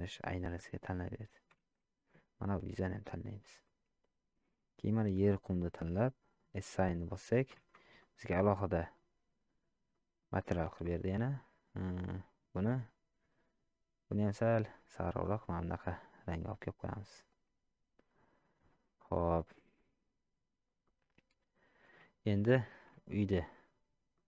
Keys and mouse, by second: 1.0 middle click, 2.0 shift+z, 3.0 middle click, 5.2 click, 6.4 click, 8.0-9.0 middle drag, 9.9 middle click, 12.3 click, 16.6-17.3 middle drag, 20.8-21.5 middle drag, 22.2 shift+middle drag, 23.1 shift+middle click, 24.1-24.2 middle drag.